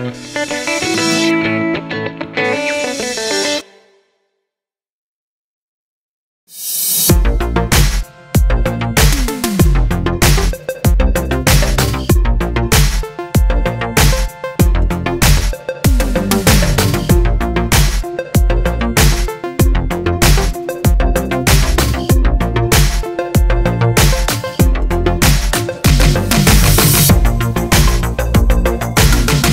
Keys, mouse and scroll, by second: 0.4 middle click, 0.7 scroll down 2, 1.0 Tab, 3.0 KP_0, 3.5-4.2 scroll up 2, 4.2 ctrl+s, 6.9 KP_1, 7.3 z, 8.0-10.7 middle drag, 8.0 scroll up 1, 8.9 g, 10.7 scroll up 1, 10.9-12.7 shift+middle drag, 11.5 g, 12.7 shift+click, 12.9-21.6 middle drag, 13.1 scroll down 1, 13.6 KP_0, 13.9 z, 14.4 scroll down 2, 14.5 z, 17.3-19.5 scroll up 2, 21.6 click, 22.4 click, 24.0 click, 25.3 click, 25.6 scroll down 1, 26.1-29.5 drag, 28.5 shift+a.